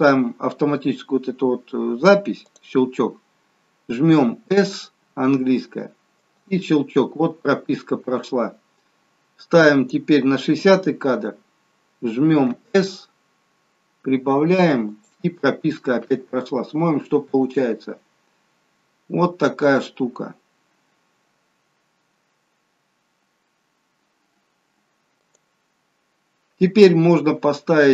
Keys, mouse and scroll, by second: 2.7 click, 4.6 s, 8.4 click, 14.1 s, 17.5 click, 25.5 click.